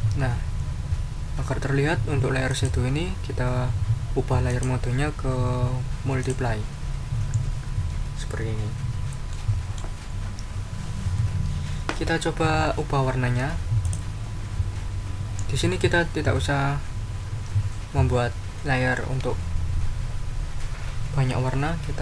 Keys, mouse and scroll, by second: 2.5 click, 4.5 click, 6.2 click, 8.6 ctrl+scroll down 2, 9.3 ctrl+middle click, 13.8 click.